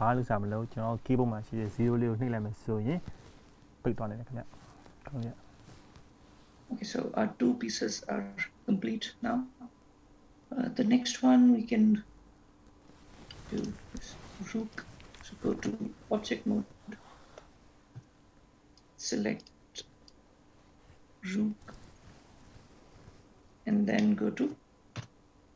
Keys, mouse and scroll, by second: 0.4-1.2 scroll down 1, 1.2-2.4 scroll down 3, 4.4 shift+middle click, 6.4 scroll up 1, 6.6-7.4 scroll down 1, 13.7 click, 14.8 click, 18.4 Tab, 18.8 click, 19.5 click, 20.2 click, 21.7-23.2 scroll down 4, 23.5 scroll up 1, 24.1 scroll up 1, 24.4 shift+middle click, 25.3 Tab.